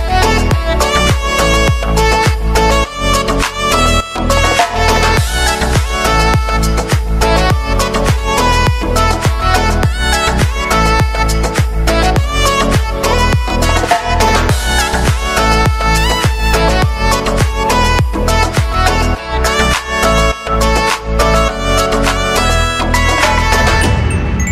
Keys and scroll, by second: 0.1-1.3 typing, 3.2 BackSpace, 4.7 ctrl+a, 4.8 BackSpace, 5.9-7.2 typing.